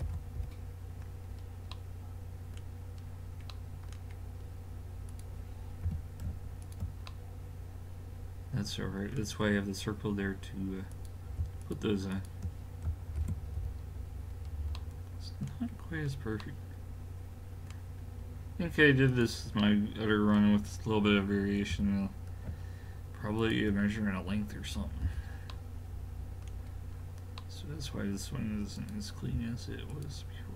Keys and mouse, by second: 0.0 alt+m, 5.1 click, 5.9 g, 6.9 middle click, 7.5 middle click, 7.8 middle click, 9.8 middle click, 10.9-13.2 right drag, 13.2 alt+m, 14.4-14.8 middle drag, 19.1-21.7 right drag, 21.7 g, 25.0 a, 26.1 middle click, 28.8-30.5 right drag.